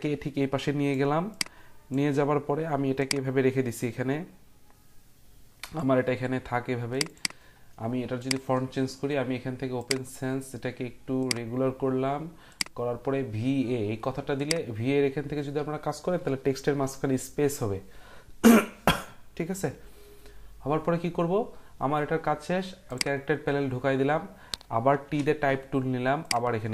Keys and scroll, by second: 25.0 t.